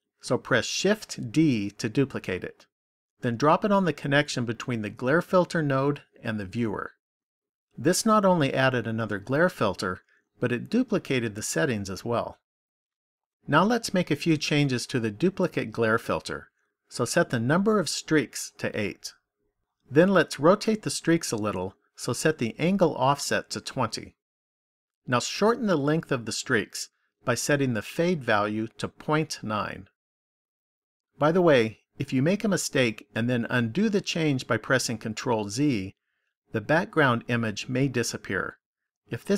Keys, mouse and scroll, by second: 35.6 ctrl+z.